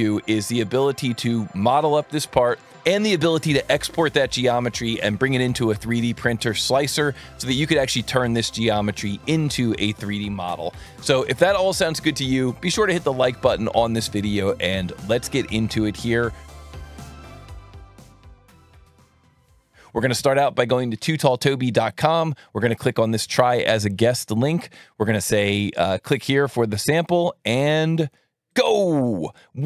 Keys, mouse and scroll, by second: 21.8 click, 23.2 click, 27.0 click, 28.5 click.